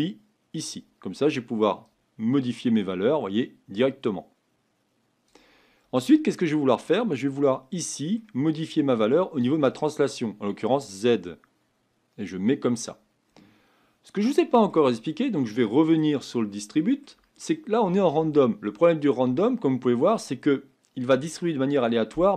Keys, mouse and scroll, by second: 0.6-22.3 drag.